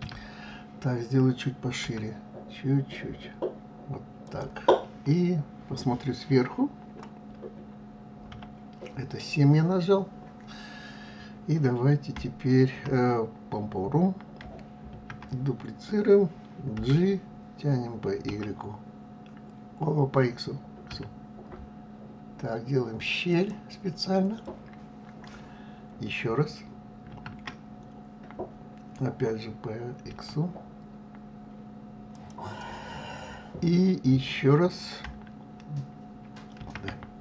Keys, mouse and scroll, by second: 8.2 KP_7, 14.8 shift+d, 27.1 shift+d, 36.5 shift+d.